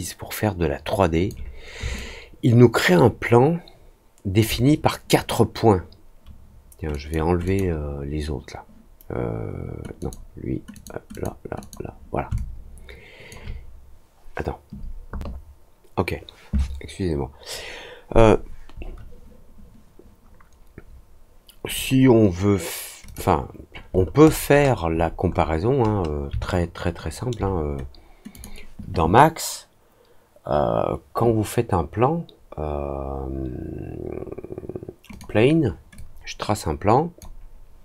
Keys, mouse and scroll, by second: 1.9-4.3 alt+drag, 6.8 click, 7.4 click, 9.9 click, 10.7 click, 11.0 click, 11.5 click, 12.3-13.2 alt+drag, 21.7 click, 23.0 click, 23.9-24.6 scroll down 6, 24.8-25.4 scroll up 3, 25.8 scroll down 1, 26.4 alt+middle click, 28.3 click, 35.0 click, 35.9-37.1 drag.